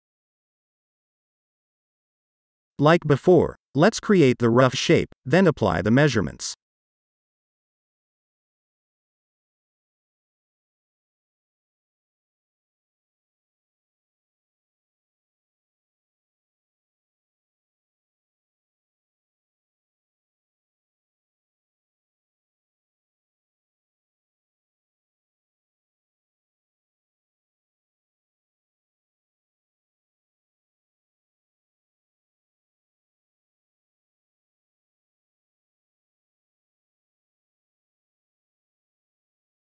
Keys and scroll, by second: 19.4 h, 22.8 shift+v, 24.8 1, 25.1 4, 26.3 Return, 31.7-34.3 typing.